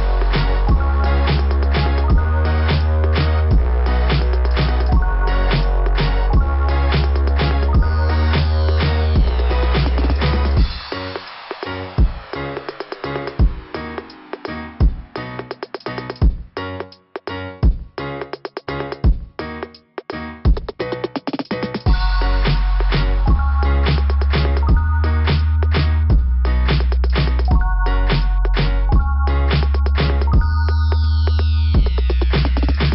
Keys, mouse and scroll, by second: 1.4 click, 1.5 click, 1.6 click, 1.8 double click, 3.3 click, 3.4 click, 5.6 click, 5.7 click, 6.9 click, 7.0 click, 7.9 click, 11.2 click, 13.5 click, 13.6 click, 14.8 click, 14.9 click, 16.2 click, 18.4 click, 25.9 scroll down 1, 27.8 scroll down 2, 29.9 click, 29.9 click, 30.3 click, 30.4 click, 31.2 click, 31.3 click.